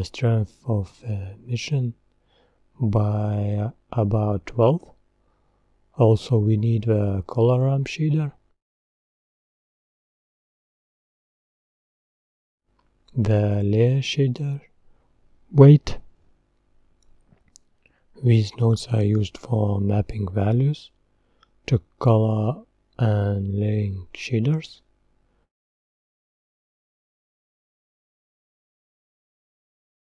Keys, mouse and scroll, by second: 1.9-22.9 drag.